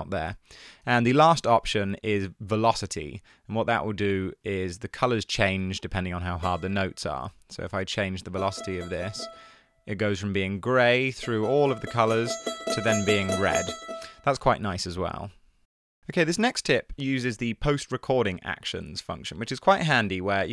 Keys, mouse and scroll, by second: 0.4 super+z, 5.6 v, 7.4 v, 14.5 super+z, 18.5 Tab.